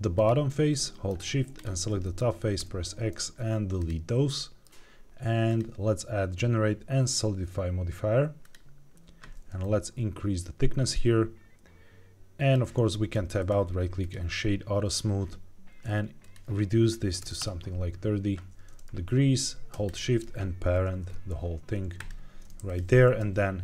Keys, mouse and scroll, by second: 0.1 click, 0.7 middle click, 1.5 shift+click, 1.9 middle click, 2.5 x, 4.3 middle click, 5.4-8.4 drag, 9.5-12.5 shift+drag, 13.3 right click, 16.1-17.3 drag, 19.8 shift+click, 20.8 ctrl+p, 22.6 click, 22.9 g, 23.1 x.